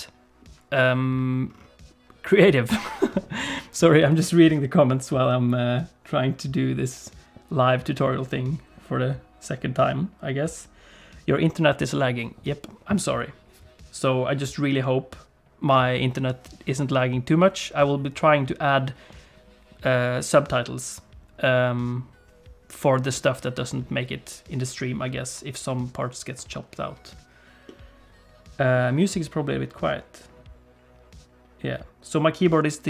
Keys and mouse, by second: 27.7-28.7 middle drag.